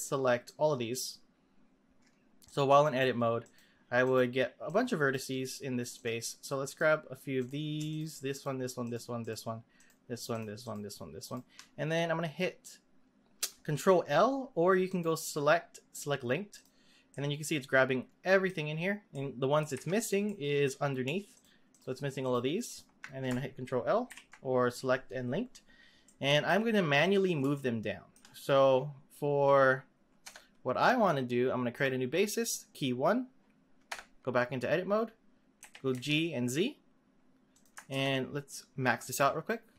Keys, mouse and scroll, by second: 0.5 click, 2.4 click, 3.4 click, 4.0 click, 4.6 click, 5.9 click, 6.4 click, 7.3 click, 7.9 shift+click, 8.3 shift+click, 8.8 shift+click, 9.2 shift+click, 9.7 shift+click, 10.3 shift+click, 10.6 shift+click, 11.2 shift+click, 14.8-17.1 drag, 17.1-18.6 middle drag, 18.6-19.1 scroll up 2, 19.1 middle click, 19.7 z, 20.2-21.3 middle drag, 21.3 shift+click, 21.7 shift+click, 22.2 shift+click, 22.6 shift+click, 24.1 ctrl+l, 26.0-30.2 middle drag, 30.2 Tab, 31.7-33.9 drag, 33.9 Tab, 35.5 g, 37.9 ctrl+z, 39.0-39.7 drag.